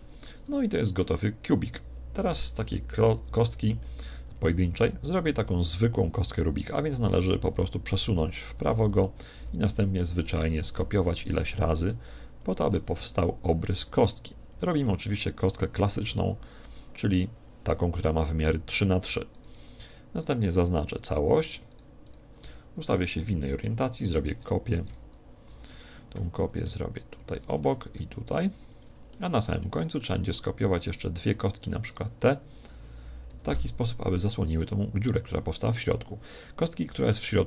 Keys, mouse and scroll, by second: 0.4 Tab, 0.8-2.5 middle drag, 3.1 KP_1, 4.0-6.3 scroll down 1, 6.3-6.6 scroll down 1, 7.6 click, 9.2 shift+d, 10.2-18.3 drag, 13.8 shift+d, 14.9 shift+d, 15.9 shift+d, 19.3-23.6 right drag, 23.0 KP_1, 23.2 KP_3, 24.3 shift+d, 27.4-30.5 drag, 27.8 shift+d, 29.2-31.6 middle drag, 30.8-33.5 right drag, 33.3 KP_1, 36.6-37.4 middle drag.